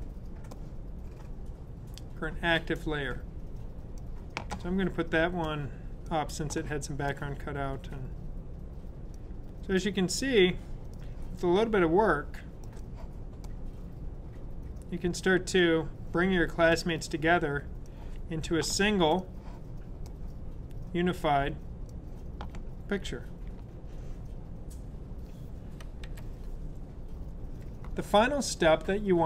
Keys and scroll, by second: 26.0 v.